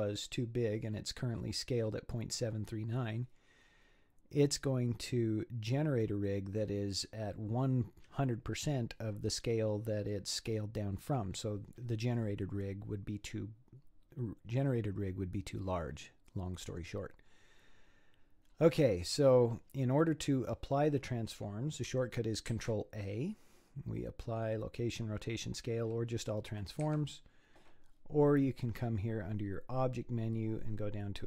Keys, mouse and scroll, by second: 17.8-21.7 scroll up 11, 22.5 ctrl+a, 28.6-31.2 drag.